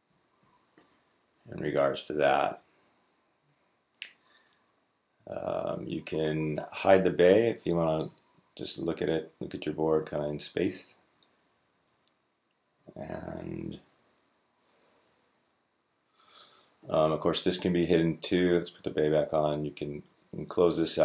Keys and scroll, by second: 0.2 Left, 11.0 Right, 11.3 Right, 11.3 Right, 11.5 Right, 11.6 Right, 11.7 Right.